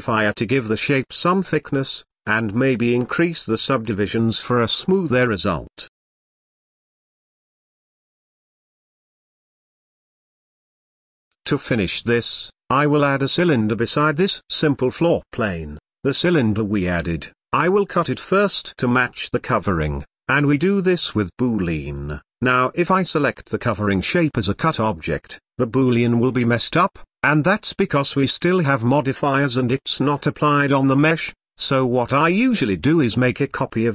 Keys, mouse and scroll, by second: 0.6 middle click, 1.1-2.1 shift+scroll up 3, 1.2 shift+middle drag, 2.1-2.8 scroll up 1, 2.8-4.6 drag, 4.6-4.9 scroll down 2, 4.9-5.8 middle drag, 5.8 scroll up 3, 6.1 shift+middle click, 6.6 click, 7.4-8.3 middle drag, 8.3-9.6 scroll down 2, 10.0 shift+a, 10.6 s, 11.5 click, 11.9 scroll down 2, 12.2 shift+middle click, 12.5 scroll up 1, 12.8 shift+a, 14.8 middle click, 15.0 s, 16.8-18.6 middle drag, 20.4 click, 21.3-22.8 drag, 26.0-26.6 middle drag, 26.6 z, 27.1-29.2 middle drag, 29.5 middle click, 29.6 click, 30.3 click, 31.1 click, 31.8 shift+d, 33.4 click, 33.6-33.9 drag.